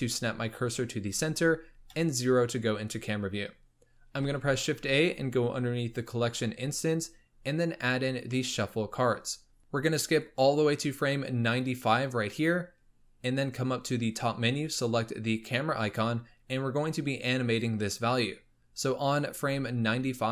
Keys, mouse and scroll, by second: 0.0-1.3 scroll up 5, 1.3-1.8 scroll up 1, 1.8 KP_0, 2.8-3.3 scroll up 3, 3.3 scroll down 2, 4.2 shift+a, 10.1-13.2 drag, 14.6-17.6 drag.